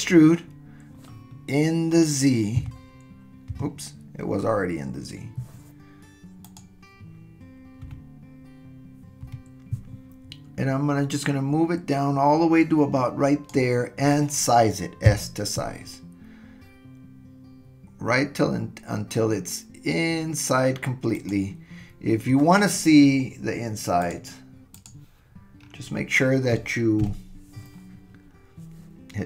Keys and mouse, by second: 7.8 KP_3, 9.2 KP_1, 11.1-13.5 drag, 15.0 s, 24.0 click, 24.9 click, 27.0 KP_Decimal.